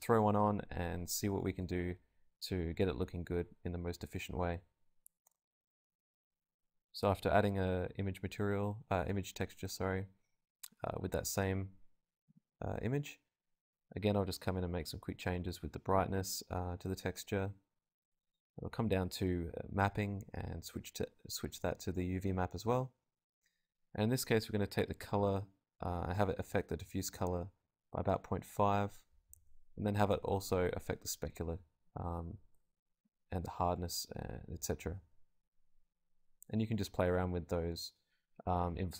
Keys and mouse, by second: 1.8-3.1 middle drag, 2.3 a, 2.8 z, 2.9 z, 3.1-4.5 drag, 3.7 KP_0, 4.8-14.8 drag, 19.8-24.8 drag, 24.8 middle click, 25.3-29.8 drag, 30.9-34.1 drag, 36.5-38.8 drag.